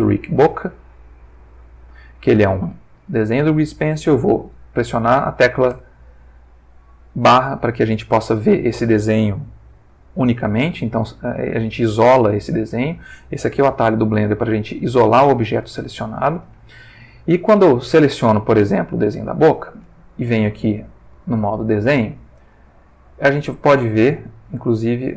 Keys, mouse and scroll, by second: 0.3 click, 1.2 g, 3.2 Escape, 5.7 /, 13.7 /, 15.5 /, 18.0 click, 20.4 click, 21.5 click, 23.2 click.